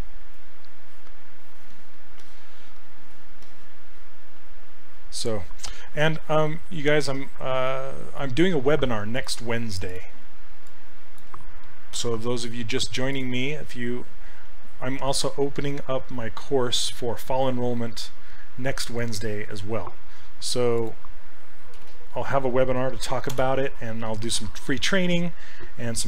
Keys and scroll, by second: 12.0 ctrl+c, 21.8 ctrl+v, 23.3 Return.